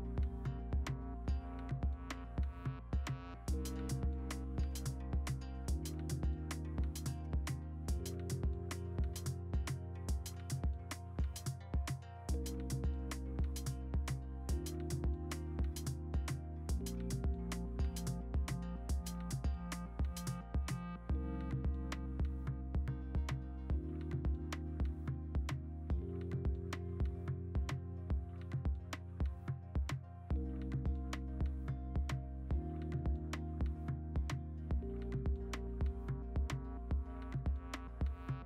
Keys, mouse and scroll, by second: 0.0-1.1 typing, 1.0 Delete, 1.1 ctrl+d, 1.8 ctrl+t, 2.4 v, 2.9 e, 7.3-8.3 scroll, 8.3 w, 8.8 ctrl+d, 9.3 e, 10.4 Delete, 10.5 ctrl+d, 10.8 alt+Tab, 10.8 v, 11.1 ctrl+t, 13.3 ctrl+t, 15.5 ctrl+t, 16.3-17.3 typing, 18.6 ctrl+t, 19.5 v, 19.9 s, 21.2 ctrl+z, 23.4-24.0 scroll, 24.6 ctrl+g, 25.1-27.2 typing, 27.4 ctrl+alt+g, 28.6 ctrl+alt+g, 29.7 b, 30.8 3, 32.7 5, 37.3 b.